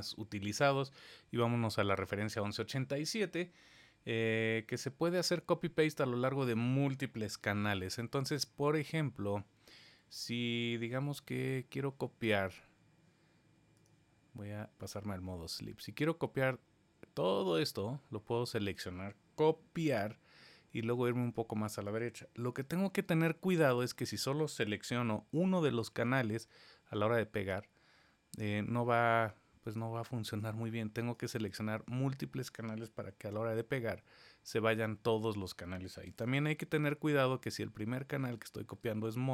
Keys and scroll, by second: 19.8 super+c, 22.5 super+v, 27.3 super+z, 33.0 super+v, 36.1 super+z, 38.5 super+c.